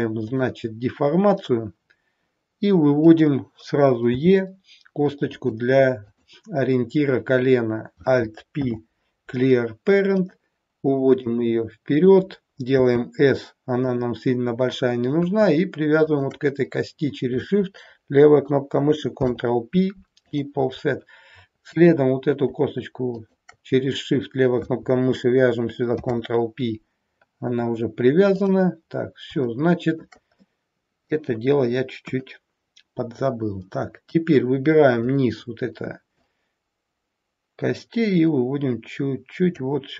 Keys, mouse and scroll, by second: 2.9 click, 4.2 e, 6.0 click, 8.5 alt+p, 11.2 click, 12.8 s, 16.0 shift+click, 19.2 ctrl+p, 21.8 click, 23.2 shift+click, 25.9 ctrl+p, 28.4 click, 28.9 scroll down 1, 29.5 shift+middle click, 30.3 middle click, 32.0 KP_1, 33.2-33.5 scroll down 2, 34.2 click, 36.0 click.